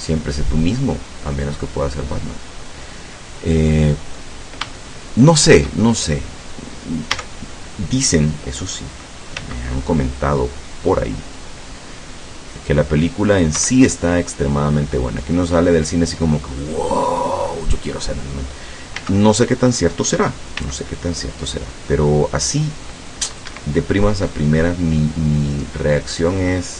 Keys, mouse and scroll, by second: 2.0-2.7 scroll down 4, 3.1-4.3 middle drag, 4.8 shift+middle click, 7.1 a, 9.4 c, 10.2-13.7 drag, 13.6 Escape, 14.1-16.9 drag, 19.0 a, 20.6 c, 21.0-23.6 drag, 23.5 Escape, 23.8 middle click, 24.7 middle click, 25.7 middle click, 26.6 scroll down 1.